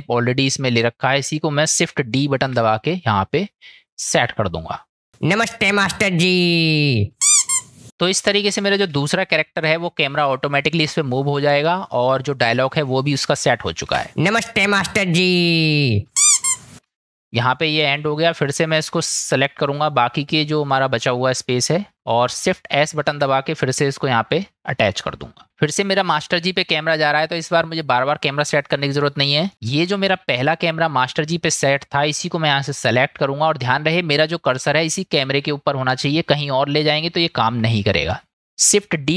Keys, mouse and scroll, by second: 2.4 shift+d, 5.1 space, 8.1 click, 13.9 space, 23.0 shift+s, 30.4 click, 38.3 ctrl+z.